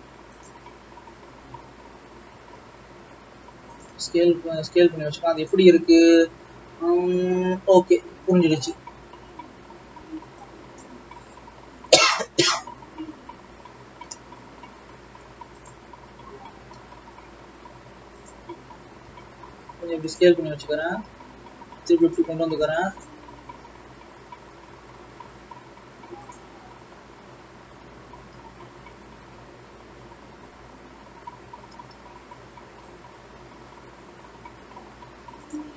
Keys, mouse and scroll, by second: 2.4 s, 4.1 alt+a, 8.9 alt+a, 9.3-9.8 scroll up 1, 9.8-10.4 scroll down 1, 10.4 click, 11.2-12.6 scroll up 1, 12.6-15.9 scroll up 2, 15.9 click, 16.6 e, 19.1 s, 20.9 e, 25.4 e, 26.6 click, 31.5 e.